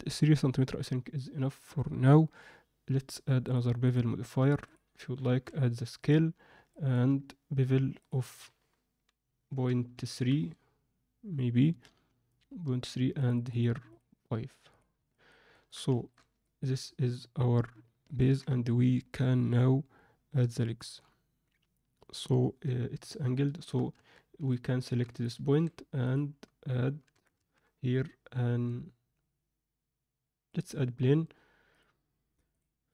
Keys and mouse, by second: 3.4 drag, 3.9-4.7 drag, 5.2 ctrl+a, 6.7 ctrl+middle click, 8.0-11.0 drag, 13.1 click, 13.8 click, 15.1 ctrl+middle click, 15.5 ctrl+middle click, 15.9 shift+middle click, 16.3 ctrl+middle click, 18.1 ctrl+alt+middle click, 23.9 Tab, 24.5 middle click, 25.4 shift+s, 27.1 Tab, 27.4 shift+a, 32.5-32.9 drag.